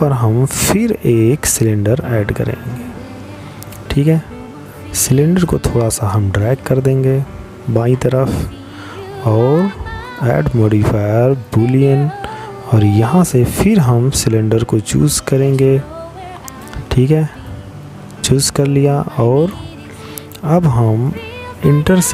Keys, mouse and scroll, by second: 0.0 click, 2.6 click, 7.6 click, 18.7 click.